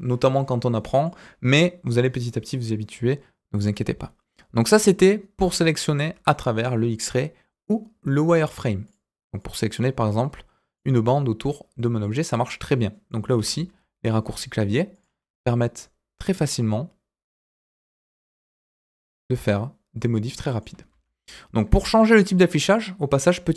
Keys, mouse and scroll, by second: 0.3 middle click, 6.1 KP_1, 8.4 click, 8.8 click, 9.3-10.7 drag, 11.8 scroll down 2, 12.0-13.1 middle drag, 13.3 s, 17.8 click, 18.1-20.6 middle drag, 20.6 scroll up 1, 20.9 ctrl+z.